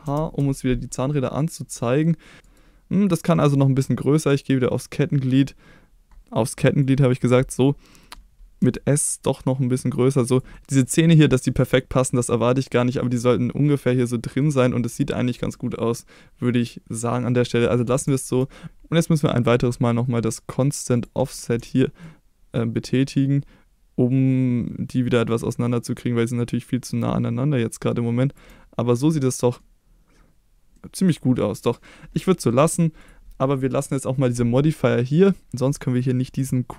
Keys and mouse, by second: 0.0 alt+h, 1.1-2.4 middle drag, 2.4 s, 4.7 click, 6.3 middle click, 6.8 click, 7.9 middle click, 8.6 s, 10.3 click, 10.5 middle click, 10.8 middle click, 12.2-12.7 middle drag, 13.1-14.4 middle drag, 15.5-17.1 middle drag, 17.2-17.6 middle drag, 18.1 shift+middle click, 20.9 click, 22.2-28.4 shift+drag, 29.1-29.6 middle drag, 30.7 middle drag, 31.4-31.8 middle drag, 32.5 middle drag, 33.0 click.